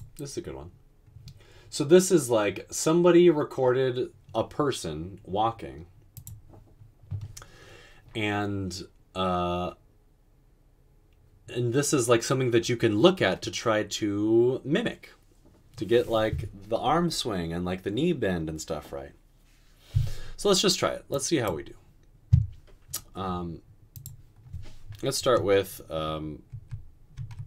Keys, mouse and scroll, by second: 26.7-27.1 typing.